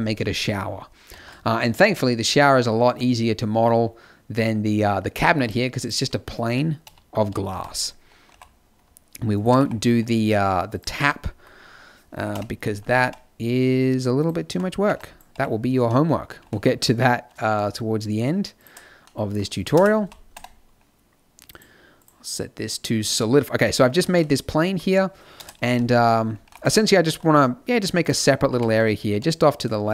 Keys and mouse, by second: 1.1 shift+a, 6.8 KP_1, 7.1 KP_5, 7.5 z, 8.2 r, 9.5 g, 10.6 g, 12.2 KP_7, 12.9 Tab, 14.4 a, 14.8 b, 15.3 g, 16.3 g, 19.7 KP_0, 20.0 z, 20.3 Tab, 24.0 z, 25.3 KP_0, 25.6 z, 26.4 g, 28.4 g.